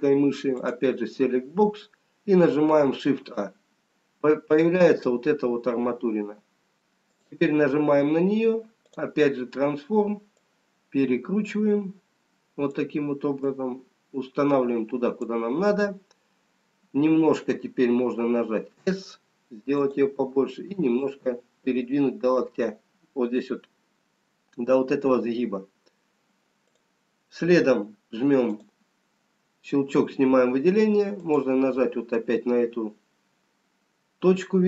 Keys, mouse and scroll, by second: 2.9 click, 3.7 shift+a, 4.9-6.3 scroll up 3, 7.8 click, 9.4 click, 10.5 click, 13.9 click, 20.8 s, 21.9 click, 26.8 click, 28.5 click, 32.6 scroll up 2, 34.2-34.6 scroll down 1.